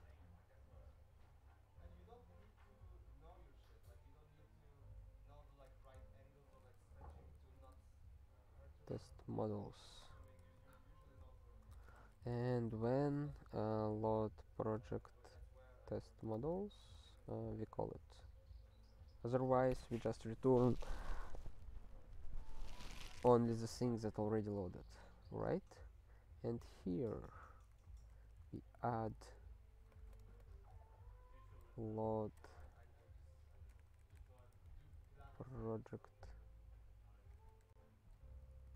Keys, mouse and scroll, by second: 5.2-8.6 typing, 9.1 alt+f, 9.8 ctrl+f, 9.8-13.8 typing, 10.9 ctrl+s, 11.0 ctrl+n, 11.2 ctrl+n, 11.3 ctrl+a, 11.7 Tab, 14.8 alt+/, 16.4 alt+shift+s, 16.9 Return, 17.3 ctrl+s, 17.9 ctrl+n, 18.5 ctrl+a, 27.3 click, 27.4 click, 27.8 ctrl+b, 28.1 ctrl+alt+f, 28.8 Return, 30.0-35.0 typing, 35.3 alt+/, 37.5-38.7 typing.